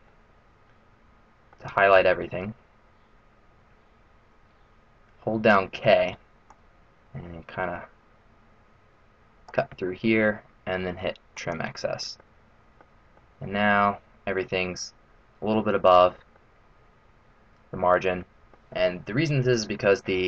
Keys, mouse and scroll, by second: 0.0 middle click, 0.0 a, 1.8 a, 5.7-6.4 k, 6.4 click, 11.3 click, 11.3 k, 12.2 middle click, 13.1 middle click, 16.3 middle click, 18.7-19.2 scroll down 4, 19.0-19.8 scroll up 2, 19.8-20.2 scroll up 3, 20.0 middle click.